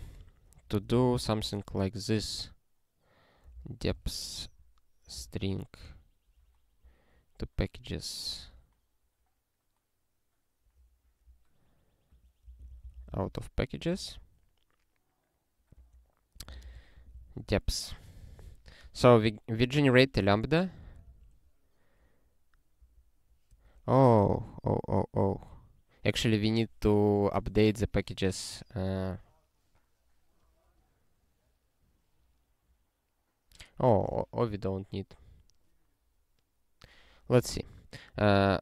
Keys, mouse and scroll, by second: 0.4-1.9 typing, 3.2-5.1 typing, 5.3 Return, 7.8 click, 8.3 ctrl+f, 12.1 click, 12.3-13.7 typing, 13.9 ctrl+f, 15.8-17.2 typing, 19.6 click, 20.6 ctrl+=, 21.0 ctrl+g, 22.7 t, 23.5 BackSpace, 37.4 ctrl+p, 38.1 Return, 38.4-38.6 typing.